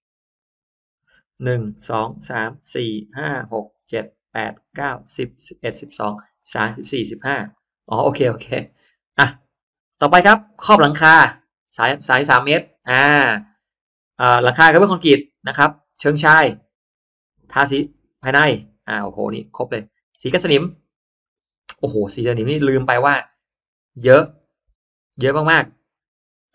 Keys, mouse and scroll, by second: 7.4 middle click, 7.8 scroll down 1, 8.7-9.0 scroll down 1, 10.2-10.6 scroll down 1, 11.2 click, 14.2 click, 15.8 click, 17.3 click, 18.5 click, 19.1 middle click, 19.1-19.4 scroll down 1, 20.2 click.